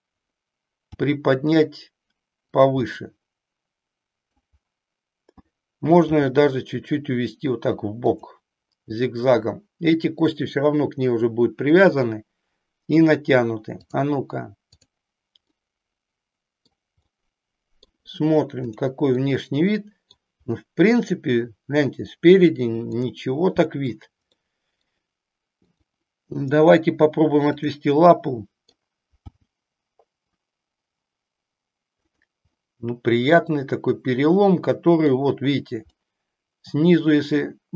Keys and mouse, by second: 0.9 g, 2.9-4.4 middle drag, 6.1 g, 13.9 click, 15.4-16.9 middle drag, 17.1 middle click, 19.2 middle click, 22.9 click, 24.4 middle click, 25.5-27.4 drag, 28.1 middle click, 29.2 g, 32.6-35.1 middle drag, 36.0-37.7 middle drag.